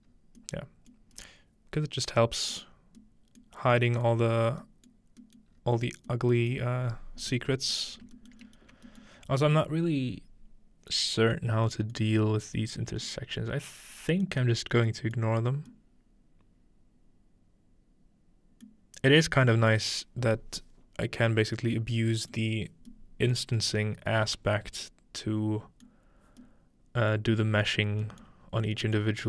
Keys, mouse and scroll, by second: 0.0 middle click, 0.1 scroll up 1, 0.9 middle click, 3.4 scroll up 1, 3.5 middle click, 4.4 scroll down 2, 5.2 scroll down 2, 5.5-7.8 scroll up 3, 7.8-8.8 scroll down 3, 8.8 alt+shift+middle click, 9.0 alt+shift+middle click, 9.3 scroll up 2, 10.9-11.4 scroll up 1, 11.4-11.7 middle drag, 12.0-12.8 middle drag, 12.3-13.5 scroll up 2, 13.1-13.9 middle drag, 13.5-13.9 scroll down 2, 14.4-15.2 middle drag, 14.4-16.1 scroll down 4, 15.3-15.7 middle drag, 19.1 middle click, 19.1-20.0 scroll down 3, 19.7-21.1 middle drag, 20.0-21.1 scroll up 1, 21.1-22.0 scroll up 1, 22.2-22.9 scroll up 1, 22.9-25.9 scroll up 1, 23.4 middle drag, 25.9 middle click, 26.2-27.7 scroll down 1, 27.7 scroll down 1, 27.9 middle click, 28.3 middle click, 28.5-29.2 scroll up 1, 29.0 middle click.